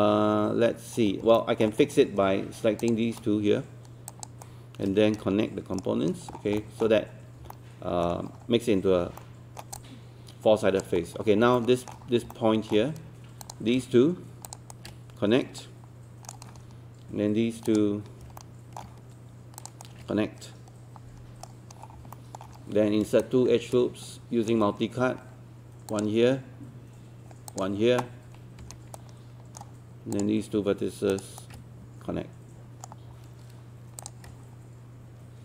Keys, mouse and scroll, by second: 1.4 alt+middle click, 1.7-2.8 scroll down 1, 2.8 click, 4.1 shift+click, 4.5-5.8 shift+right drag, 6.3 scroll down 1, 6.6 alt+middle click, 6.9-7.4 scroll up 1, 7.5 alt+middle click, 8.0-9.1 scroll down 1, 9.2 alt+middle click, 9.8 alt+click, 11.0-11.4 scroll up 1, 11.6 alt+middle click, 12.0 scroll up 1, 12.3 alt+middle click, 13.4 click, 14.5 shift+click, 14.7-16.8 shift+right drag, 17.7 click, 18.4 alt+middle click, 19.6 shift+click, 19.8 shift+right click, 21.8 scroll down 1, 22.1 alt+middle click, 22.6-23.1 scroll up 1, 23.2 shift+right click, 28.6 ctrl+q, 29.0 right click, 30.1 click, 31.1 shift+click, 31.4-33.8 shift+right drag, 34.0 click.